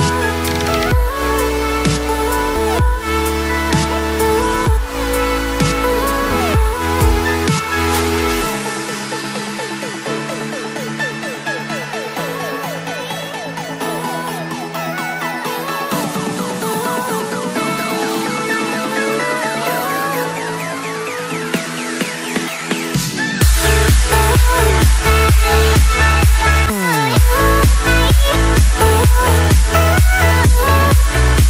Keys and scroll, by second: 0.2 ctrl+e.